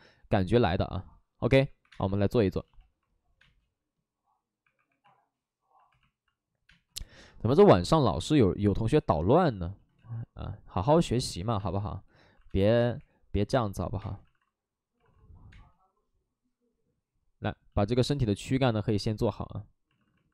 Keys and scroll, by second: 1.7 1, 1.8 space, 1.9 1, 3.3 space, 4.5 1, 4.5 space, 6.6 space, 6.6 2, 10.3 ctrl+z, 11.2 alt+s, 11.5-12.9 typing, 12.2 alt+s, 13.9 space, 14.2 alt+s, 15.4 alt+s, 15.4 space, 19.8 alt+s.